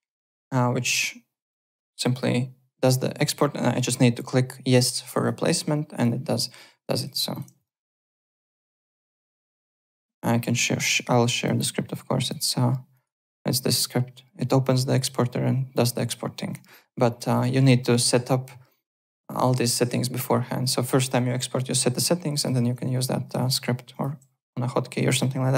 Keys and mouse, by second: 1.5 KP_Multiply, 5.1 click, 5.9 click, 6.8 click, 7.3 `, 7.3 click, 7.6 alt+right click, 9.7 Home, 10.8 click, 12.2 click, 12.9 click, 16.5 click, 17.1 click, 19.0 click, 20.8 click, 22.4 click, 22.9 click, 23.4 alt+Tab, 23.9 alt+click.